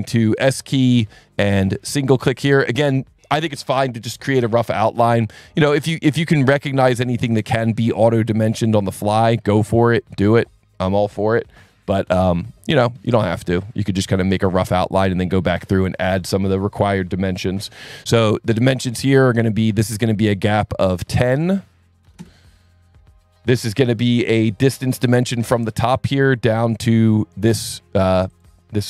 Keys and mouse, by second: 0.7 click, 2.3 click, 5.0 click, 6.7 click, 8.0 click, 8.7 click, 9.5 click, 12.3 click, 14.1 click, 15.1 click, 17.7 s, 18.5 click, 19.5 click, 20.8 click, 21.4 click, 22.0 KP_1, 22.1 KP_0, 22.2 KP_Enter, 26.5 click, 27.7 click.